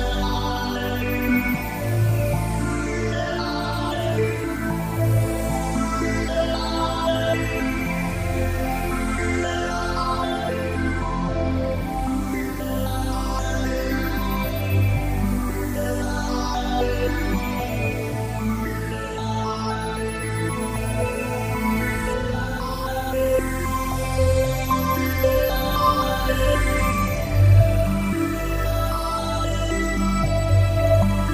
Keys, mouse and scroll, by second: 0.4 click, 10.3-11.2 scroll up 4, 11.2 middle click, 18.8 middle click, 20.4-21.8 scroll up 3.